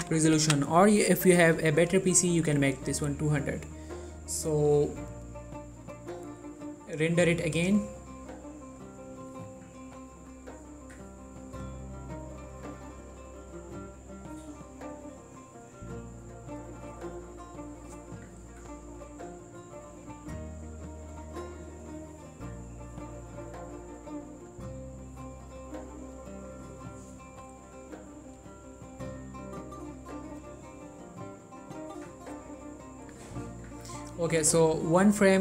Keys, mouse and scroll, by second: 5.3 click, 8.4-10.2 scroll down 1.